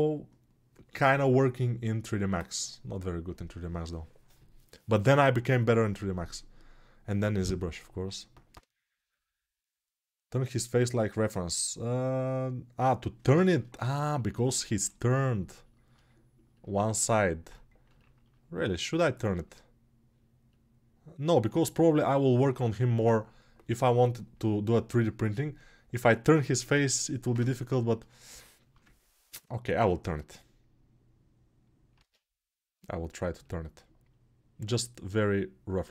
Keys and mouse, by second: 31.7 ctrl+Tab, 32.8-35.9 middle drag.